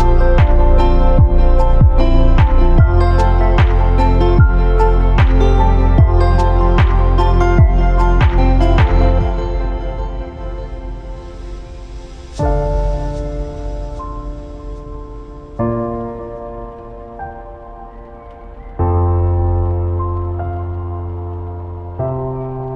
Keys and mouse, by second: 2.3 typing, 3.1-4.5 drag, 4.8-5.3 drag, 5.8 click, 6.0 shift+drag, 6.8 ctrl+b, 10.7 Tab, 11.1-12.5 drag, 12.7 q, 14.6-15.1 drag, 16.7 drag, 18.2 click, 18.9-19.4 drag, 19.9-20.4 shift+drag, 20.8-21.5 shift+drag, 21.7 shift+click, 22.7 click.